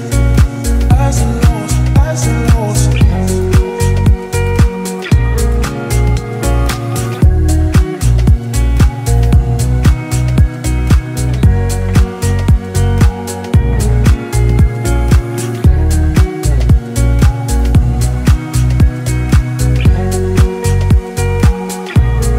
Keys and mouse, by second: 1.8 ctrl+z, 5.2 ctrl+z, 5.9 middle click, 6.7 alt+middle click, 8.6 middle click, 10.8 alt+middle click, 14.0 ctrl+z, 20.3 ctrl+z.